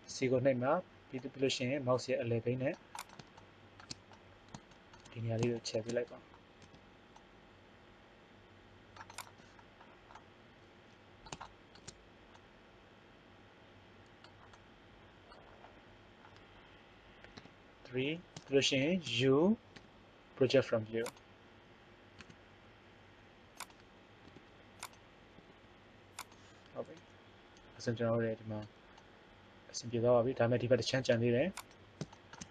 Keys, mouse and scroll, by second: 0.0 c, 3.3 middle click, 6.7 c, 8.8 click, 9.3-11.2 middle drag, 17.3 KP_3, 19.7 u, 22.1 s, 24.2 r, 25.3 g, 29.0-30.9 middle drag, 32.1 middle click.